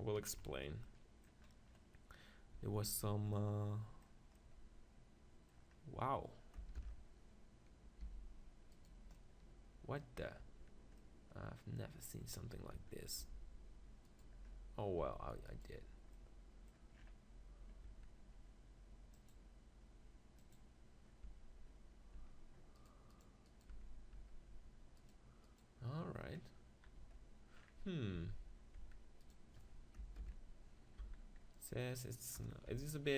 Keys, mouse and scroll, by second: 2.6 Tab, 2.9 Tab, 6.8 ctrl+l, 8.1 g, 9.2 middle click, 10.4 Tab, 12.7 Tab, 13.2 g, 14.2 click, 14.4 right click, 15.0 g, 17.9 Tab, 21.3 Tab, 22.2 Tab, 23.8 Tab, 24.2 Tab, 24.5 Tab, 27.0 Tab, 27.6 middle click, 28.2 z, 28.8 Tab, 30.2 ctrl+l, 31.0 z, 32.5 KP_0, 32.7 Tab.